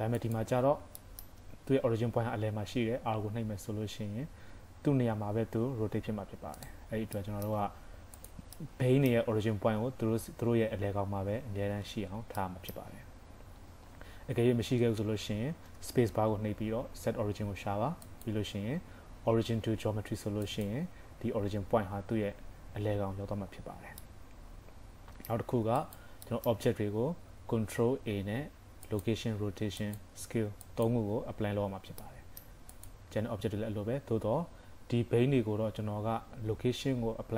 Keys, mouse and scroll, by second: 0.2 click, 0.7 scroll up 1, 1.0 shift+middle click, 3.2 r, 6.9 scroll down 2, 7.2 shift+middle click, 8.2 click, 8.6 middle click, 12.4 middle click, 13.1 scroll up 1, 15.7 space, 23.6-24.2 scroll down 3, 24.0 middle click, 25.8 click, 26.3 shift+middle click, 27.0-27.5 scroll up 1, 27.8 ctrl+a, 32.0 middle click, 32.8 click, 35.7 ctrl+a.